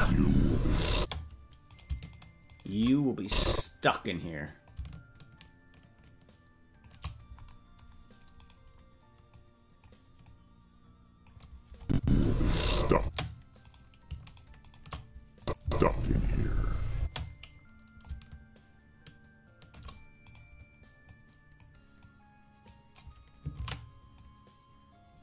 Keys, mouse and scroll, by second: 0.9 space, 1.7 right click, 2.1 shift+right click, 3.2 click, 4.6-6.8 drag, 8.4 right click, 9.2 click, 10.2-11.2 drag, 11.8 click, 11.9 space, 12.9 space, 13.6 right click, 14.3 shift+right click, 15.3 click, 15.3 shift+right click, 15.6 space, 17.0 space, 18.0-19.7 drag, 20.3 right click, 21.0 click, 21.9 click, 23.9 ctrl+z, 24.1-25.2 drag.